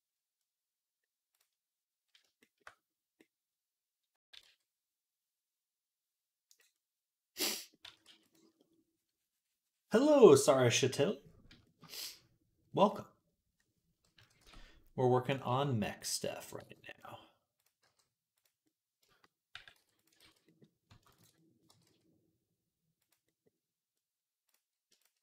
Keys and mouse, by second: 4.0 s, 6.6 click, 7.7 s, 10.3 click, 11.7 middle click, 12.8 middle click, 14.0 KP_3, 14.2 Tab, 15.3 g, 16.4 g, 18.2 g, 18.7 middle click, 18.9-23.2 shift+middle drag, 19.4 g, 20.1 ctrl+z, 21.5 g, 23.9 middle click, 24.8 shift+click, 24.9-25.2 middle drag, 25.1 g.